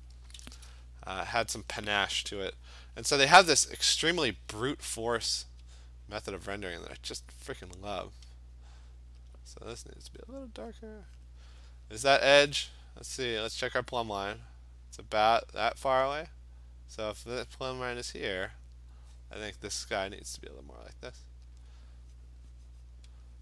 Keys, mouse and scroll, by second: 3.8 alt+click, 5.4 click, 6.3 alt+click, 7.6 click, 9.3 alt+click, 10.3 click, 10.8 click, 11.3 click, 11.4 alt+click, 12.0 alt+click, 20.9 click, 21.6 alt+click, 22.2 click, 22.6 click, 22.7 alt+click, 22.9 click, 23.3 alt+click.